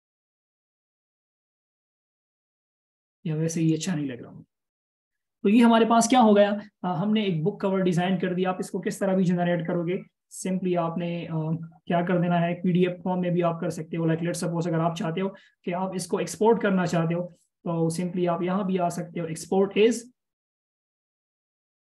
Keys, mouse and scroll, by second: 1.9 alt+shift+scroll down 1, 5.0 BackSpace, 9.4 BackSpace, 10.9-11.3 alt+shift+scroll up 1.